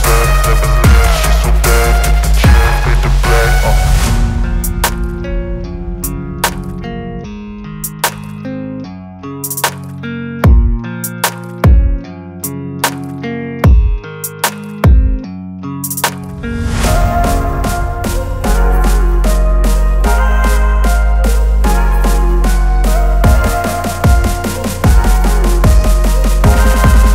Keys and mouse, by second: 0.7 click, 5.4 click, 8.2 click, 11.3 v, 12.6 click, 16.7 click, 19.2 click, 21.5 click, 22.7-27.1 drag.